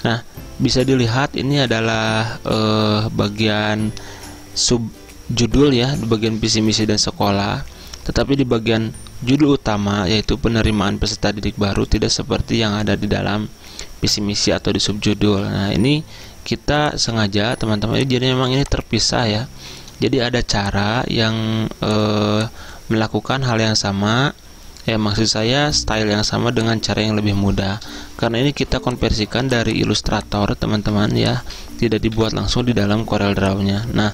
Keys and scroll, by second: 32.2 Delete.